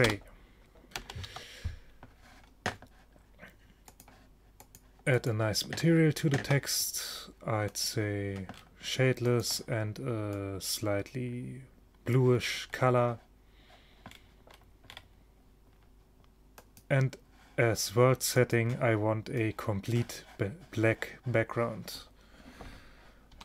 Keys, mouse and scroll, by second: 0.1 Return, 1.1 BackSpace, 1.3 Tab, 3.9-6.3 drag, 7.8-11.1 drag, 13.3-16.6 middle drag, 16.6-20.2 drag.